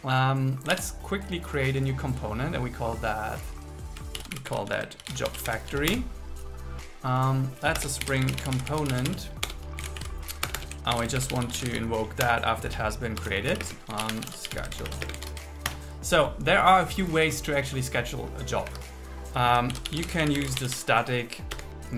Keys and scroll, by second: 0.9 super+1, 4.2 shift+j, 4.7 shift+f, 5.9 Return, 7.8 Return, 8.1 alt+l, 8.4 shift+c, 9.5 Return, 10.0 super+Right, 10.5 Return, 11.0 alt+l, 11.2 shift+p, 11.8 shift+c, 12.3 Return, 13.6 space, 14.8 shift+9, 15.1 space, 15.3 alt+8, 15.7 Return, 18.7 Escape, 19.8 shift+b, 21.6 Return.